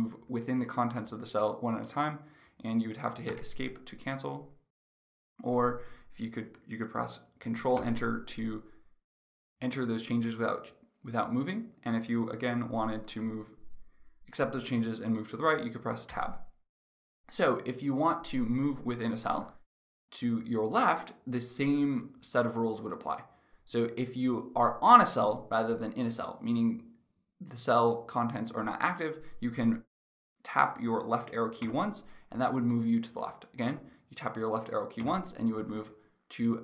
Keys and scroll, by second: 0.0 Right, 1.9 Right, 2.9 Escape, 7.3 ctrl+Return, 15.8 Tab, 31.1 Left, 34.5 Left, 35.3 Left.